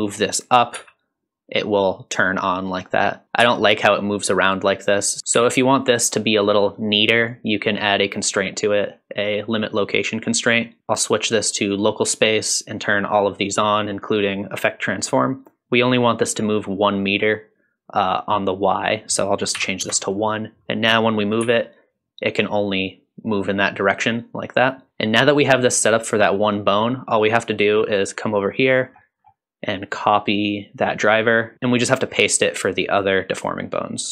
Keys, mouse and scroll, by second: 0.7 g, 3.4 g, 5.3 g, 8.7-9.9 drag, 10.8-11.8 drag, 12.9-14.3 drag, 18.8-20.1 drag, 21.4 g, 27.9 click, 28.8-29.8 scroll down 4, 29.8 click, 30.0-31.4 right drag, 31.5 click, 33.4-34.0 scroll down 2, 34.0-34.1 right drag.